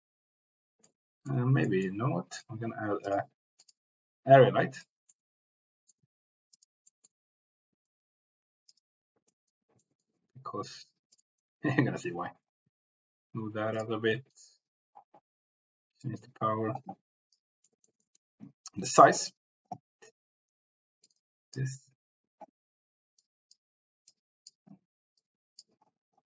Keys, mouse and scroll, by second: 0.8 middle click, 2.0 x, 3.0-5.0 drag, 5.1-6.1 middle drag, 6.1 g, 6.6 drag, 7.0 middle click, 7.3 r, 8.7 click, 9.4 middle click, 10.0 middle click, 11.4-12.0 middle drag, 11.4 g, 12.7 g, 14.2 middle click, 16.1-17.4 drag, 17.7 middle click, 19.0-20.5 drag, 21.1 click, 23.2 click, 24.2 click, 25.2 click.